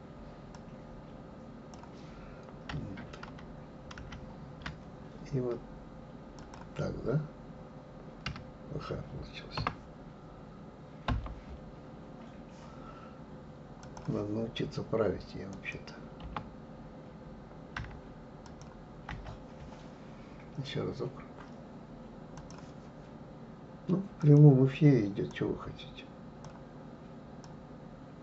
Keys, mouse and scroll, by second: 3.3 ctrl+z, 4.0 ctrl+z, 13.8-15.7 drag, 16.2 Return, 17.8 Delete, 18.4 click, 19.1 Delete, 22.4-25.4 drag.